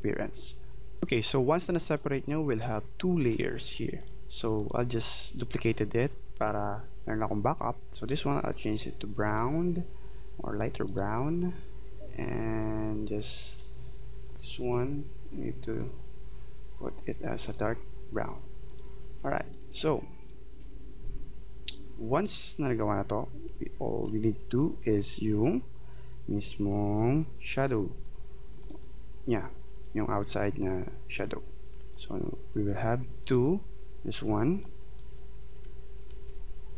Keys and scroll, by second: 19.8 space, 36.1 ctrl+z.